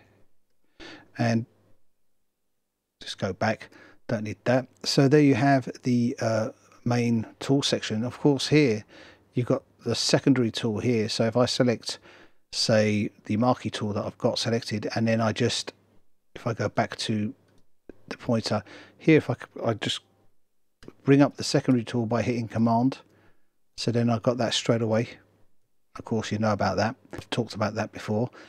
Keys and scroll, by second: 1.5 super+z.